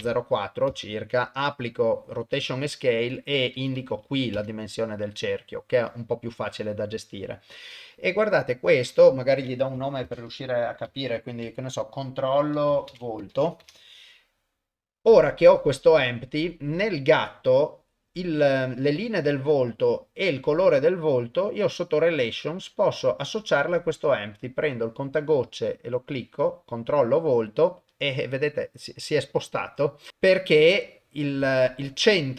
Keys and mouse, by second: 0.7 ctrl+a, 3.2-4.4 drag, 9.0 F2, 16.5 click, 19.4 click, 19.7 click, 21.3 middle click, 21.8 middle click, 23.4 click.